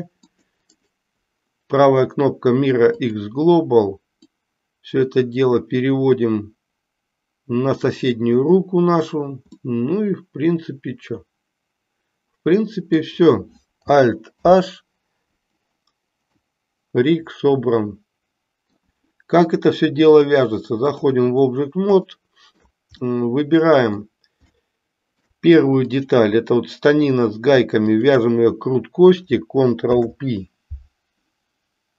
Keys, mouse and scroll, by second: 0.9-3.2 right drag, 4.2-7.9 drag, 9.5-13.2 middle drag, 14.5 alt+h, 16.2-18.9 middle drag, 20.2 click, 22.0-22.6 shift+middle drag, 23.0-24.0 middle drag, 24.6-25.2 shift+middle drag, 25.9 click, 27.9 shift+click, 29.8 ctrl+p.